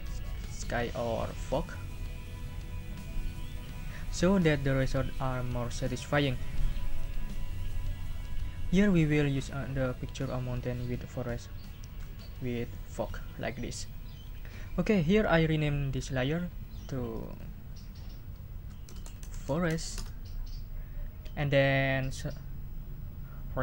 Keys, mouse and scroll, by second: 17.1 click, 18.6-20.1 typing.